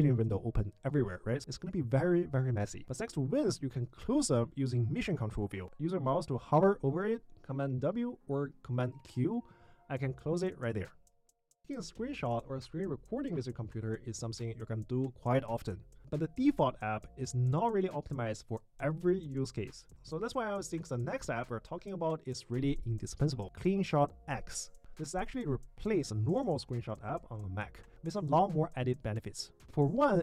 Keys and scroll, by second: 1.0 super+w, 4.1 super+w, 5.8 super+q, 8.4 super+q.